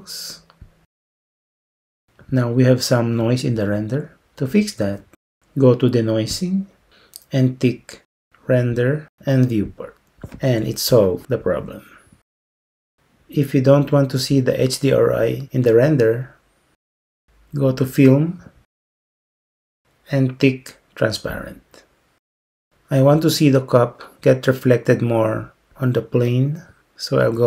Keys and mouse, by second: 6.5 click, 8.8 click, 9.8 click, 19.2 click.